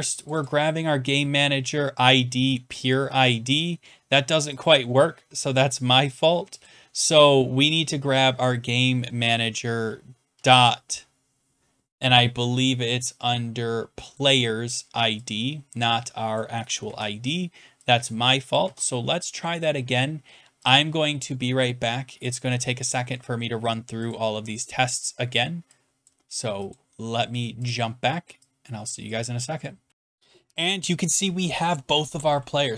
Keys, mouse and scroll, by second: 0.3 click, 0.4 click, 3.3 click, 4.6 click, 6.1 click, 6.6 click, 10.3 click, 14.1 click, 16.3 click, 16.8 ctrl+c, 18.5 click, 18.6 ctrl+v, 22.9 click, 24.1 click, 26.1 click, 26.7 click, 27.4 click, 27.7 click, 29.1 click, 29.9 click.